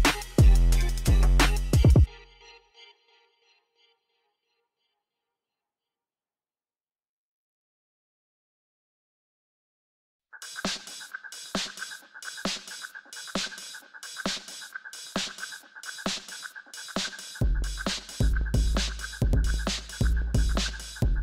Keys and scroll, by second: 1.1 g, 1.2 z, 2.4 Tab, 3.3 Tab, 3.5-5.8 typing, 4.2 alt+a, 5.2 Return, 7.6 Tab, 10.4 s, 10.6 n, 10.8 Return, 13.1-14.7 typing, 19.3-20.2 typing, 20.5 Return.